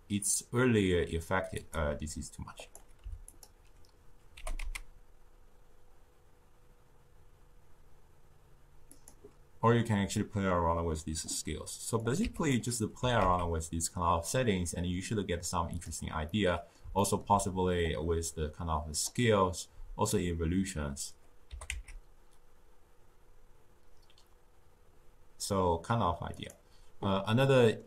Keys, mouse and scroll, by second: 2.5 click, 4.3 g, 11.9 click, 12.9 g, 16.2-17.7 middle drag, 17.7-20.8 drag, 21.4 g, 27.3-27.8 middle drag.